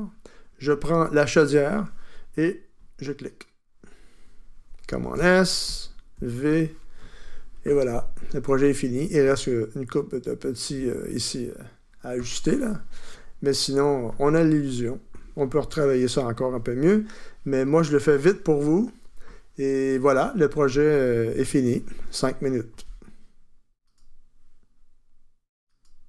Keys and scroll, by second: 5.1 super+s, 6.5 v.